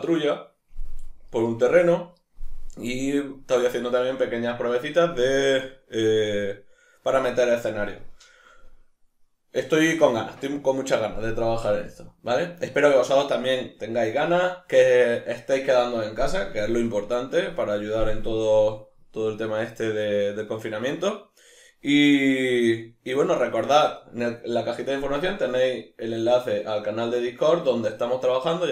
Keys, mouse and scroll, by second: 22.8-23.3 middle drag.